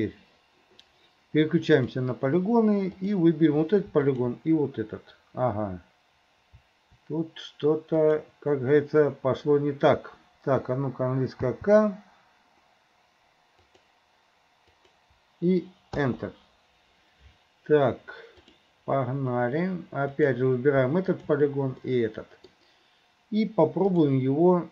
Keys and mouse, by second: 1.9 middle click, 3.0 click, 4.2 shift+click, 8.1 click, 11.5 k, 18.6 right click, 20.2 right click, 21.2 shift+right click, 21.9 middle click, 24.0 right click.